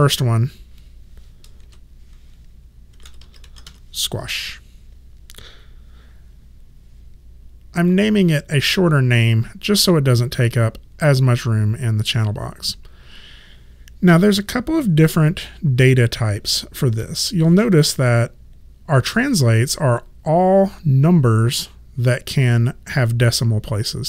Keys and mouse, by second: 1.6 shift+s, 2.7-4.2 typing, 7.9 click.